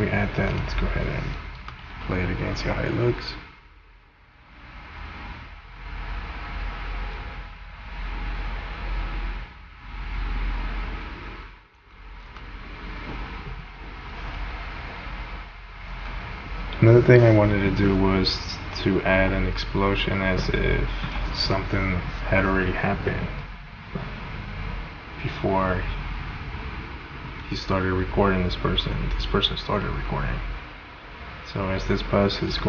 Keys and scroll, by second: 1.6 space, 11.8 space, 14.8 space, 16.0 space.